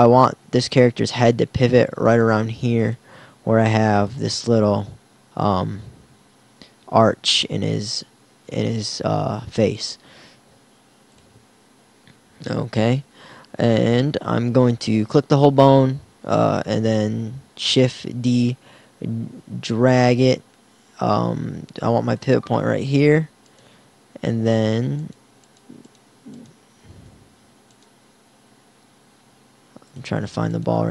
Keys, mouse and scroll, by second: 2.3 g, 2.9 click, 3.5 g, 10.1 g, 16.1 shift+d, 22.3-24.3 drag, 26.9 a, 28.0 r.